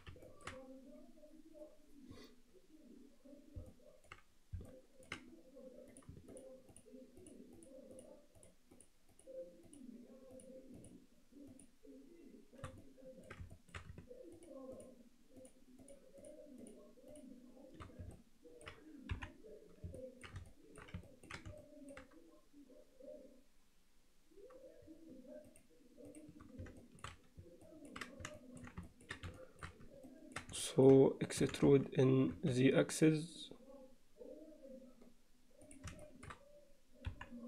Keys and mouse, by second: 0.3 ctrl+middle click, 3.7-4.1 alt+middle drag, 4.7-5.1 alt+middle drag, 6.3 shift+click, 7.2 shift+click, 7.9 shift+click, 9.2 shift+click, 9.7 shift+click, 10.4 shift+click, 11.5 shift+click, 12.9 alt+middle click, 13.5 shift+middle click, 14.4 shift+click, 14.7 shift+click, 15.4 shift+click, 18.2 alt+middle click, 19.1 KP_1, 20.0 alt+middle click, 20.5 alt+shift+middle click, 21.1 ctrl+alt+middle click, 21.6 alt+shift+middle click, 25.5 shift+click, 26.1 shift+click, 26.8 shift+middle click, 27.7 ctrl+middle click, 28.4 alt+shift+middle click, 28.9 ctrl+middle click, 29.4 alt+shift+click, 30.1 ctrl+alt+middle click, 30.7 alt+shift+middle click, 31.5 e, 36.1 shift+middle click, 37.1 KP_1.